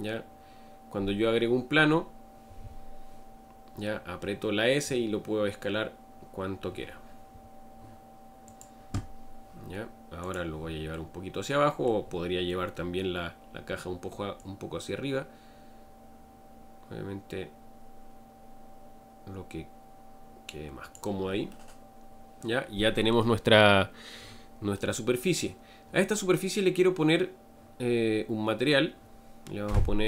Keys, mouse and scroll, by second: 10.2-10.8 drag, 10.8-16.9 middle drag, 21.9-30.0 middle drag.